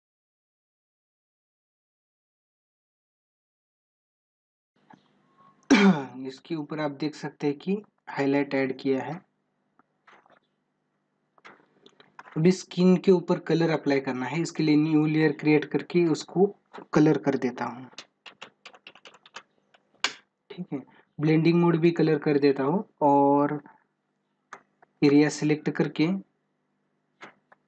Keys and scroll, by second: 1.8 ctrl+alt+z.